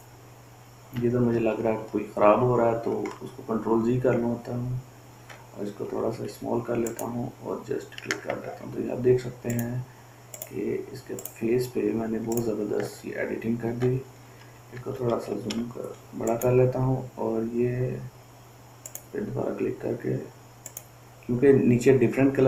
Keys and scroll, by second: 2.0 ctrl+alt+z, 2.6 ctrl+alt+z, 3.1 ctrl+alt+z, 6.2 [, 6.6 [, 15.1 ], 15.5 ], 15.7 ], 15.9 ].